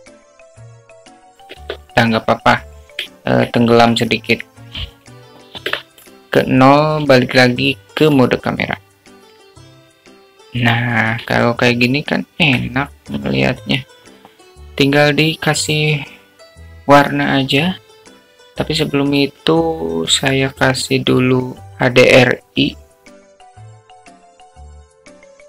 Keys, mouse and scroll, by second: 5.1 alt+middle click, 6.1 alt+middle click, 7.7 KP_0, 9.4 q, 10.3-11.4 alt+middle drag, 13.4-14.5 shift+middle drag, 15.1 q.